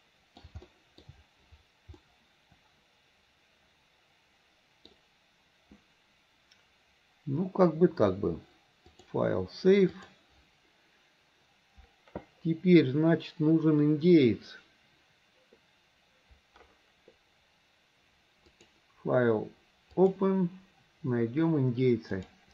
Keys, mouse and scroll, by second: 0.7-1.1 shift+middle drag, 2.0-4.9 middle drag, 9.0-11.0 drag, 18.5-20.3 drag.